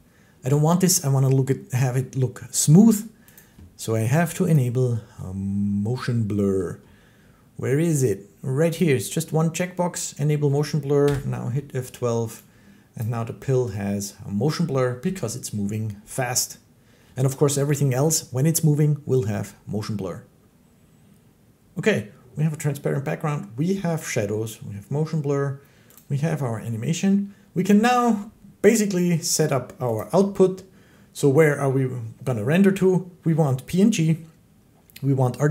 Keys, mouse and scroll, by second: 0.3 Escape, 3.2 click, 4.4 click, 8.6 click, 10.9 F12, 12.9 click, 13.8-18.0 drag, 25.8-30.8 drag.